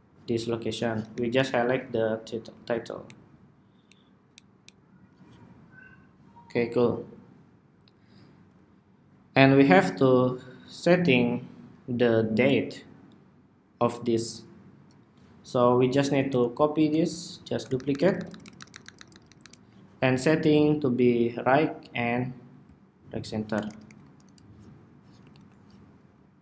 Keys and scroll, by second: 0.2 alt+Up, 0.4 alt+Up, 3.0 alt+Up, 3.4 alt+Down, 3.7 alt+Down, 16.4 super+d, 22.7 alt+shift+Right, 22.9 alt+shift+Right, 24.3 alt+Left, 24.4 alt+Left.